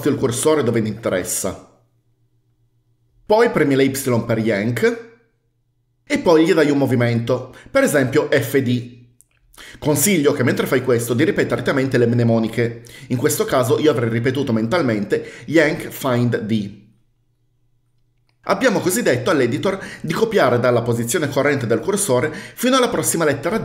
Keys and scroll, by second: 0.0-1.4 typing, 4.7 typing, 8.5-9.5 typing.